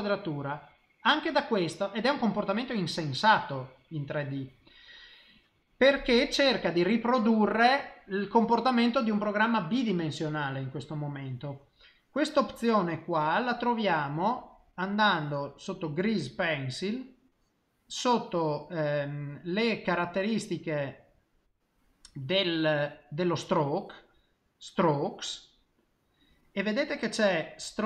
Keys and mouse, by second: 13.2 click, 21.0 click, 22.2 click, 25.8 middle click.